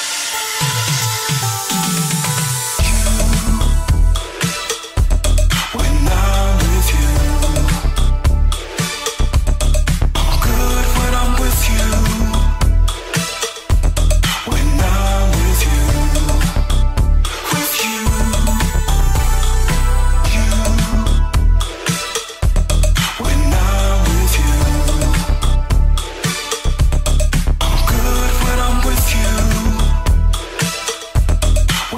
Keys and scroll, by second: 2.5 ctrl+c, 2.7 Left, 4.8 ctrl+KP_1, 7.0 ctrl+KP_1, 7.9 ctrl+KP_1, 8.2 ctrl+c, 9.9 ctrl+Left, 10.2 ctrl+KP_1, 10.3 w, 10.6 Left, 10.8 ctrl+KP_1, 11.0 ctrl+KP_1, 12.0 -, 12.9 ctrl+s, 14.2 ctrl+KP_1, 20.4 ctrl+z, 24.5 ctrl+KP_1, 24.9 ctrl+KP_1, 26.8 f, 29.4 g, 30.3 g.